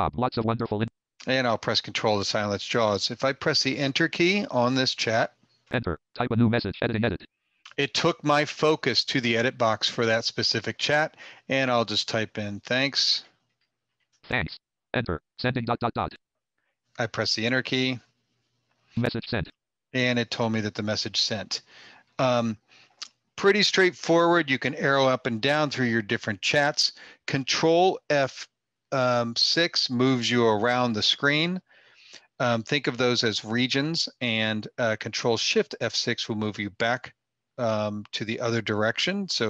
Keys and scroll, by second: 2.9 Return, 5.8 Return.